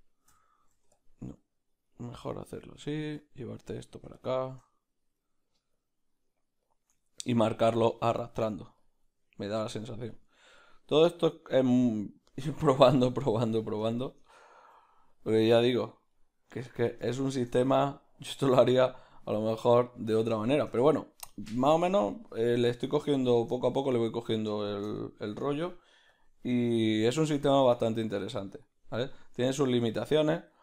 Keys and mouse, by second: 1.0 f, 1.7-12.9 drag, 1.8 middle click, 2.8 middle click, 4.6-5.7 middle drag, 7.0 ctrl+middle click, 9.0 middle click, 11.0 middle click, 11.4 ctrl+middle click, 11.8 middle click, 12.7 KP_Decimal, 12.9-15.9 middle drag, 12.9 KP_Decimal, 15.1 f, 15.9-29.5 drag, 17.1 shift+middle click, 18.7 f, 20.0 middle click, 23.6 middle click, 24.9-26.2 middle drag, 27.2 f, 27.3 shift+middle click, 29.5 middle click, 30.3 ctrl+click.